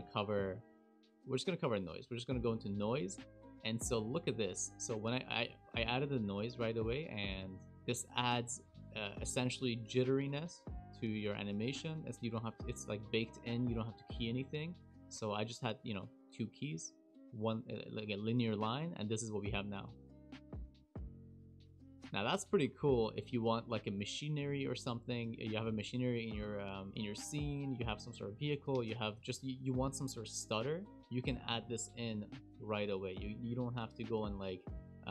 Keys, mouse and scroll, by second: 3.1-3.6 scroll down 1, 3.7 shift+middle click, 5.0 shift+middle click, 7.6 click, 19.2 space, 22.6 space, 23.4 click.